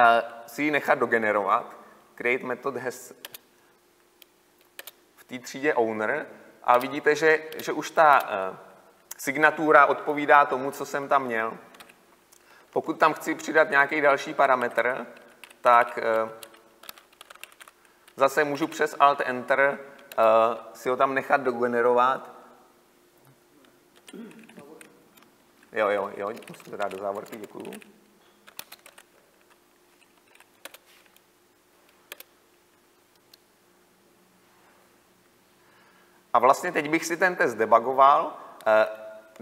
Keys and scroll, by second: 6.9 Return, 11.9 ctrl+alt+Left, 13.1 ctrl+alt+Left, 20.2 alt+Return, 26.5 ctrl+shift+Right, 26.8 ctrl+x, 29.9 ctrl+v, 31.0 alt+Return.